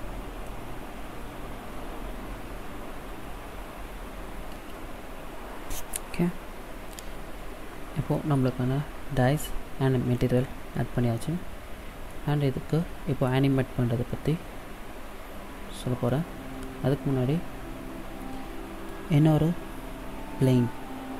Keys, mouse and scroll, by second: 6.4 scroll down 2, 7.2-7.8 scroll down 2, 8.0 middle click, 11.9 middle click, 15.9 middle click.